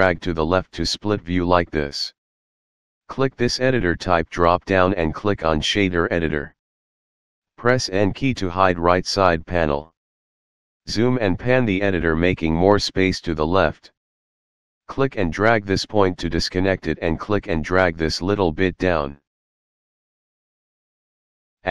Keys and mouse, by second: 4.7 click, 6.5 click, 7.0 shift+middle click, 8.5 n, 12.0 shift+middle click, 15.5 click, 16.4 click, 19.9 shift+a.